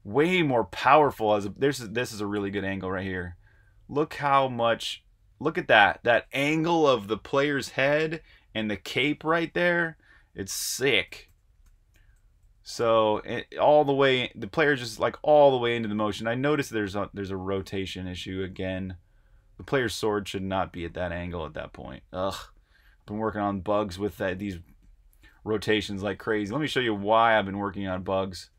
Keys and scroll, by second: 0.0-4.7 typing, 9.5-17.2 typing, 25.9 super+Tab, 28.1 typing.